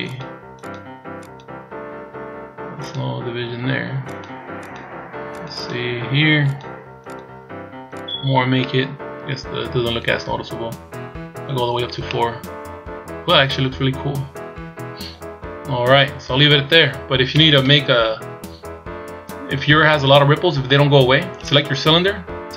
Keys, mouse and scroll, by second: 0.0 click, 0.5 click, 1.2 click, 2.8 click, 4.0 click, 4.6 click, 5.3 click, 5.5 click, 6.4 click, 7.0 click, 7.8 click, 8.6 middle click, 11.7 scroll down 2, 12.0 middle click, 16.8-17.5 scroll down 1, 17.5 scroll down 1, 17.5 KP_1, 18.6-20.0 scroll up 3, 22.4 right click.